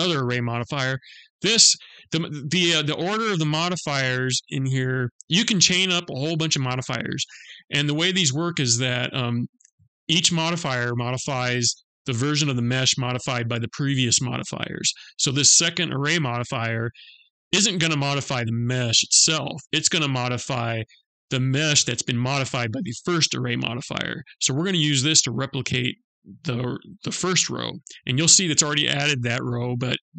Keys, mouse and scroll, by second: 2.1-2.6 scroll down 2, 3.8 click.